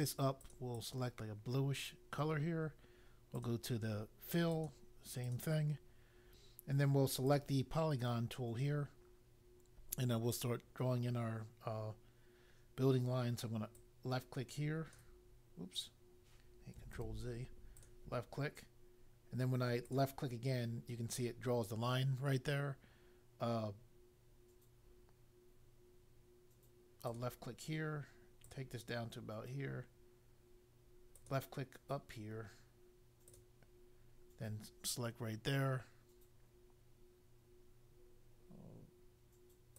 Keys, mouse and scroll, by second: 0.7 click, 3.4 click, 4.5 click, 5.2 click, 7.2 click, 13.8 click, 17.0 ctrl+z, 17.8 click, 19.8 click, 27.0 click, 28.4 click, 31.2 click, 33.2 click.